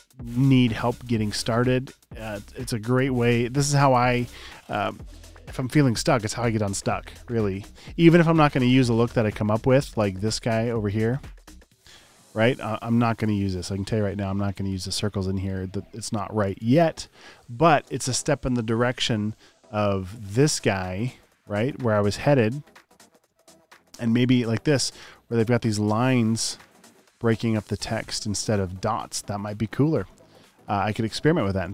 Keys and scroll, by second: 0.0 super+space, 0.8 space, 1.2 space, 2.4 space, 3.3 space, 9.2-11.9 typing, 12.9 space, 16.5 space, 19.3 space, 19.8 space, 22.6 alt+super+space, 23.8 space, 24.0 space, 24.6 super+space, 28.1 space, 28.5 space, 30.1 space, 31.2 space.